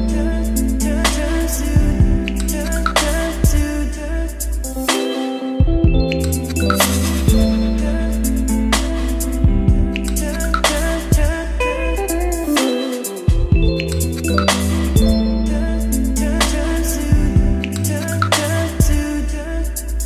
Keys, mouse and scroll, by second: 0.0-0.4 typing, 0.5 click, 0.9 ctrl+space, 1.1 Return, 1.7 ctrl+space, 1.9 Down, 2.1 Return, 2.9 click, 3.1 Return, 3.2 ctrl+v, 3.9-4.9 drag, 4.7-5.8 typing, 5.7-7.2 middle drag, 7.2-8.5 drag, 8.5 middle click, 9.0 click, 9.5-10.5 typing, 11.0 Return, 11.9 ctrl+s, 17.0-18.7 drag, 18.7 Return, 19.2 Up.